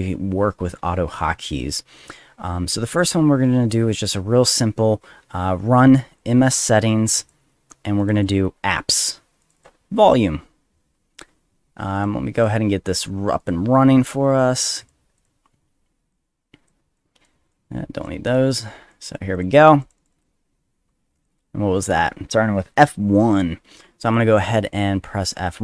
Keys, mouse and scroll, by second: 3.0 click, 3.9 middle click, 6.2-7.3 drag, 8.0 click, 8.1 click, 9.4 click, 11.9 click, 12.4 click, 13.4 click, 14.1 right click, 14.8 click, 15.2 click, 16.1-16.7 drag, 17.0 click, 17.5 click, 18.3 click, 18.9 drag, 19.3 click, 19.8 click, 20.0 click, 20.1 click, 21.2 click, 21.8 click, 24.1 click, 24.6 click.